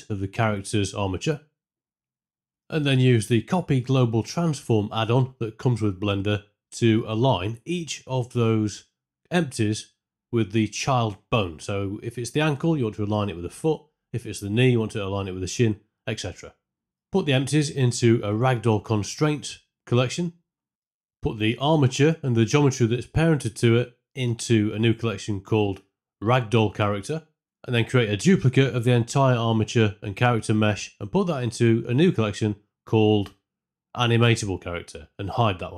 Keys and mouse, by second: 0.0-2.1 typing, 0.7 click, 1.7 click, 2.0 click, 2.5 Tab, 5.1 click, 5.3 Tab, 5.8 click, 6.8 click, 7.8 s, 10.9-15.4 typing, 11.1 Tab, 11.2 Tab, 11.3 Tab, 11.7 Tab, 11.8 click, 11.9 Tab, 12.3 click, 12.4 Tab, 12.5 Tab, 12.6 Tab, 12.9 Tab, 13.2 Tab, 13.3 Tab, 13.5 Tab, 13.9 Tab, 13.9 click, 14.6 Tab, 14.6 click, 14.7 Tab, 14.8 Tab, 14.9 Tab, 16.2 click, 17.8 shift+g, 18.1 m, 18.5 l, 19.6 KP_Subtract, 20.2 click, 20.3 l, 22.0-22.6 right drag, 24.9 m, 26.1 l, 26.6 e, 26.8 BackSpace, 29.0 shift+d, 31.6 m.